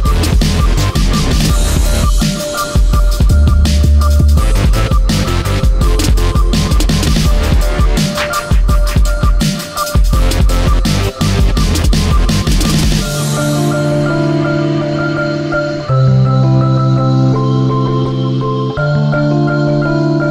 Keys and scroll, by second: 0.6 ctrl+x, 3.6 ctrl+v.